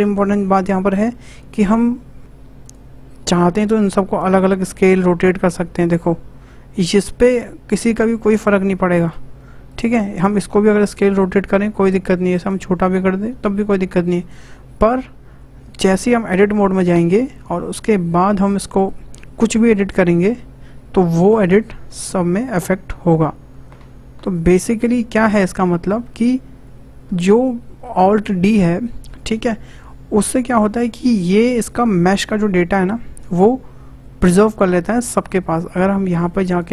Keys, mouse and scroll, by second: 2.6 click, 3.6 s, 4.6 click, 4.6 s, 4.8 s, 6.8 click, 8.0 r, 9.7 click, 10.4 s, 16.3 Tab, 17.1-17.5 scroll up 4, 17.5-18.7 shift+middle drag, 18.7 click, 19.6 click, 19.9-21.1 middle drag, 21.1 e, 22.8 e, 23.0 e, 24.6 click, 25.3 Tab, 25.7-26.0 scroll down 3, 26.0-29.1 shift+middle drag, 36.5 click.